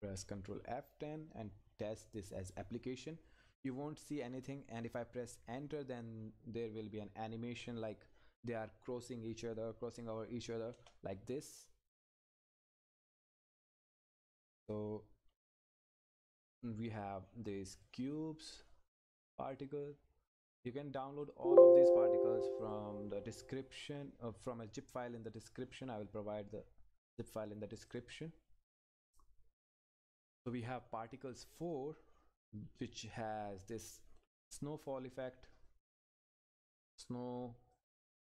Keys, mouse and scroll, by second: 10.7 Return, 18.3-18.7 scroll up 1, 19.5 click, 27.7 click, 31.7 click, 32.6 Up, 35.9 click.